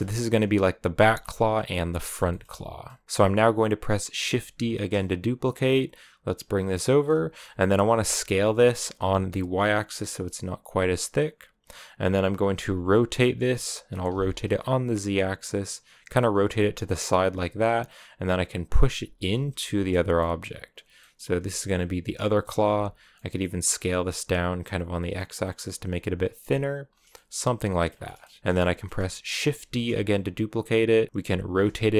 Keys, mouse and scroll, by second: 0.9-3.0 shift+middle drag, 3.0-4.5 scroll up 1, 4.5 shift+d, 6.9-7.9 middle drag, 7.9 s, 12.4 r, 16.4 middle click, 17.1 g, 18.9 r, 19.7 middle click, 20.2 g, 20.8 middle click, 21.3 s, 22.5 s, 25.7 r, 26.3 g, 26.7 scroll down 3, 26.9 middle click, 27.7 scroll up 2, 27.9 middle click, 28.2 r, 28.4 g, 28.4-29.5 middle drag, 29.5 shift+d, 31.4 r.